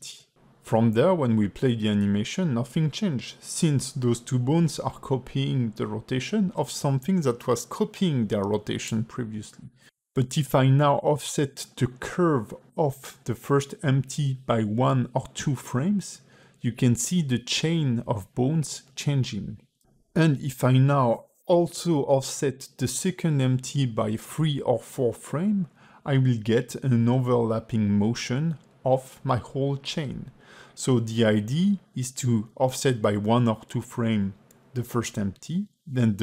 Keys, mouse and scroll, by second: 0.6 click, 3.2 space, 6.5 space, 7.5 ctrl+Tab, 8.0 click, 9.5 a, 10.7 space, 11.5 g, 16.8 space, 18.7 space, 19.7 space, 20.4 click, 21.2 a, 21.7 g, 27.7 click, 28.5 g, 29.8 space, 30.7 ", 31.2 ", 34.8 middle click.